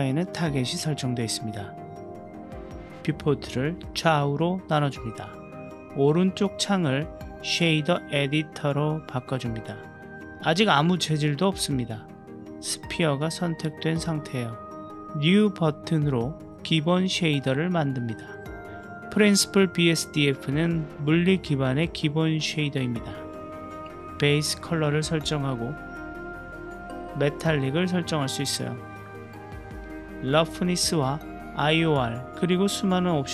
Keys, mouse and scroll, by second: 1.3 ctrl+alt+q.